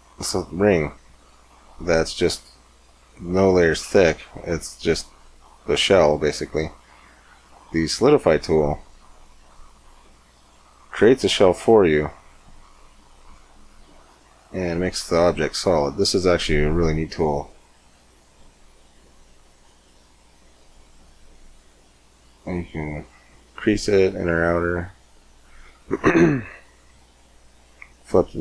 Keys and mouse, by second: 2.7 Tab, 6.0 Tab, 8.7 click, 11.5-13.3 drag, 13.3-15.1 middle drag, 15.8-17.6 middle drag, 17.7-19.4 drag, 19.4-20.8 middle drag, 20.8-26.2 drag, 26.5-28.4 drag.